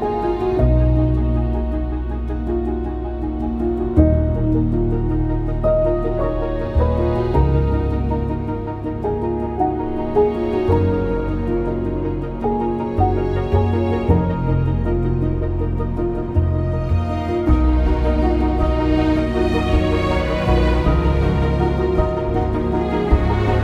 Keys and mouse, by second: 2.1 j, 5.3 alt+h, 10.1 click, 11.7 2, 12.1 alt+click, 14.7 g, 14.9 g, 16.5 Escape, 17.4 g, 17.5 g, 22.3 2, 23.3 ctrl+b.